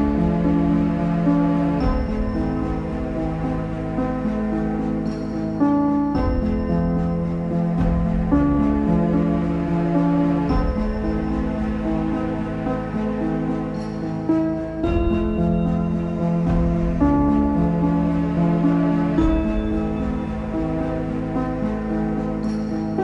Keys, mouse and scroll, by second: 0.0 g, 1.0 shift+middle click, 1.3 scroll up 3, 1.6-4.2 shift+middle drag, 4.2-5.2 drag, 5.2-5.5 scroll up 5, 5.5 shift+middle click, 5.9-6.6 scroll up 3, 6.6 click, 7.9-8.5 scroll down 2, 8.5-9.1 scroll down 10, 9.2 scroll down 4, 10.0 click, 10.6-13.0 shift+middle drag, 13.0-14.7 drag, 15.4 shift+click, 16.0 shift+click, 17.4 ctrl+p, 17.8 click, 18.3 g, 19.2 middle click, 20.0 z.